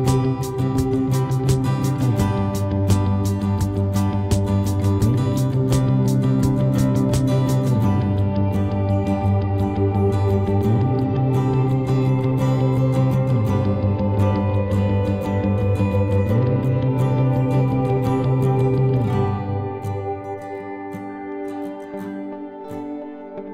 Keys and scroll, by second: 5.8 v.